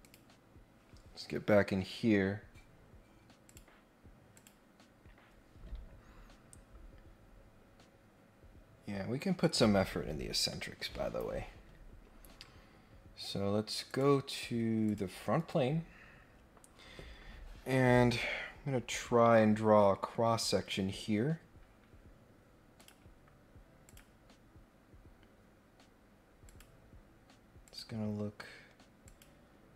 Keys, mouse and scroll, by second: 3.5 click, 4.3 click, 13.9 click, 14.8 click, 22.8 click, 23.8 click, 26.4 click, 27.6 click, 29.0 click.